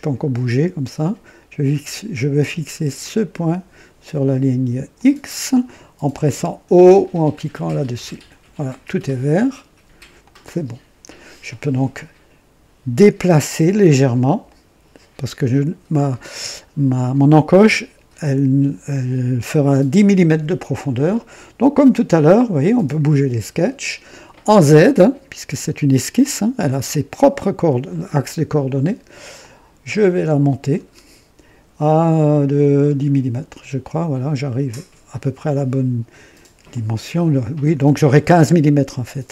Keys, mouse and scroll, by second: 2.9 click, 4.9 click, 7.9 typing, 10.1 click, 11.9-13.3 drag, 13.8-14.1 scroll up 1, 14.4-15.0 right drag, 22.0 click, 22.7 click, 26.1-26.9 drag, 29.3 click, 30.1 scroll up 1, 30.7 scroll up 1, 32.8-33.1 scroll up 1, 36.6 click, 37.5-38.2 drag.